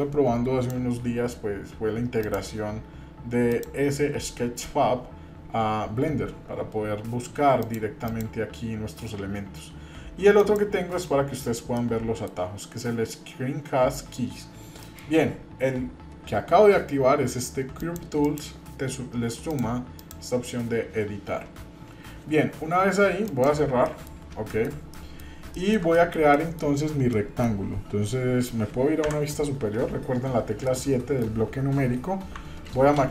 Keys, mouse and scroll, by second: 2.2 click, 3.5 click, 7.6 click, 8.0 click, 10.4 click, 11.8 middle click, 14.8 middle click, 19.5 click, 20.0 click, 23.8 middle click, 24.3 scroll up 1, 24.5 shift+middle click, 24.9 middle click, 25.5-25.8 shift+middle drag, 25.9 middle click, 26.3 middle click, 27.1 middle click, 29.0 KP_7, 30.7-31.4 shift+middle drag, 32.7 ctrl+space.